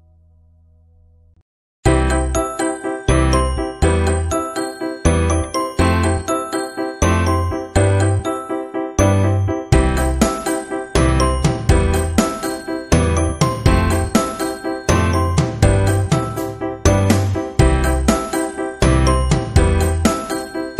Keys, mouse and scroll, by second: 1.0 click, 1.8 click, 2.5 space, 2.6 click, 3.0 space, 4.4 click, 6.1 click, 11.1 click, 11.5 typing, 13.2 click, 18.1-19.0 typing, 19.0 click.